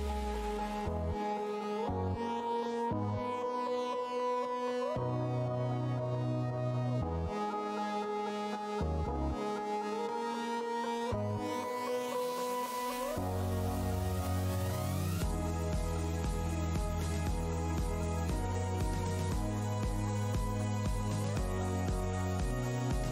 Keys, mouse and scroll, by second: 0.2 alt+space, 0.2 scroll up 1, 0.8 shift+Tab, 2.1 Tab, 2.6 alt+Tab, 2.8 alt+click, 3.0 alt+Tab, 3.1 shift+x, 3.9 shift+Tab, 4.5 Tab, 7.8 alt+Tab, 7.9 alt+click, 8.0 alt+click, 8.4 alt+Tab, 8.8 click, 9.0 alt+Tab, 9.6 alt+Tab, 10.2 shift+Tab, 10.5 shift+d, 11.1 alt+click, 11.6 Tab, 12.3 click, 13.4 click, 14.2 Tab, 14.9 shift+Tab, 16.6 alt+w, 17.4 alt+Tab, 18.7 Tab, 18.9 click, 19.4 Tab, 19.6 alt+click, 19.7 scroll up 1, 21.5 alt+scroll down 1, 22.3 scroll down 1.